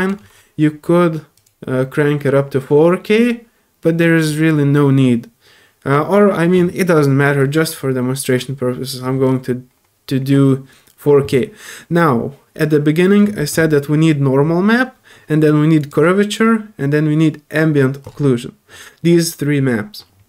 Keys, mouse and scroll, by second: 1.3 click, 7.8 middle click, 7.8 scroll down 1, 15.8 click, 18.0 click.